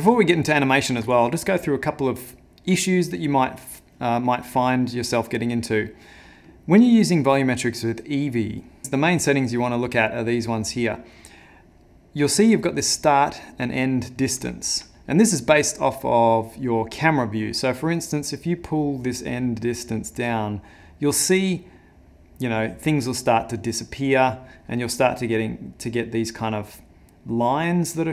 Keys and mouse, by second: 0.1 shift+middle click, 0.2 shift+middle click, 5.2 middle click, 8.7 click, 8.8 click, 18.3 click.